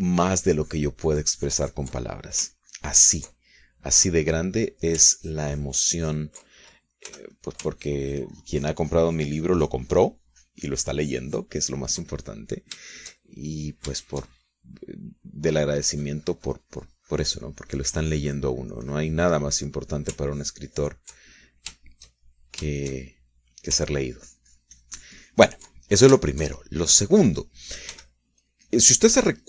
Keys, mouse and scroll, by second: 0.0-2.1 ctrl+drag, 2.2 ctrl+click, 3.2 ctrl+click, 3.7-4.9 ctrl+drag, 4.9-6.2 middle drag, 6.4-7.5 ctrl+drag, 8.3 f, 8.5 click, 9.0-13.7 ctrl+drag, 13.7 shift+middle click, 14.0-15.1 shift+middle drag, 15.2 shift+middle click, 16.4 middle click, 17.0-20.7 drag, 20.8 middle click, 21.5 ctrl+click, 22.5 ctrl+middle click, 23.0-24.8 ctrl+shift+middle drag, 25.1-26.9 ctrl+drag, 27.0-28.2 ctrl+shift+middle drag, 28.4 ctrl+shift+click, 29.1 f.